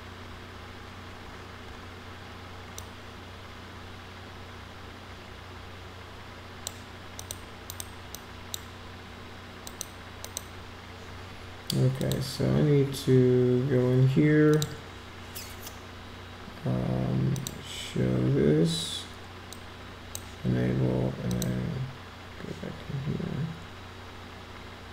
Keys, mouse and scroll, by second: 2.7-6.6 drag, 7.1 click, 7.7 click, 8.1-8.5 drag, 9.6 click, 10.2 click, 12.0 click, 14.5 click, 17.3 click, 19.5-20.1 drag, 21.2 click.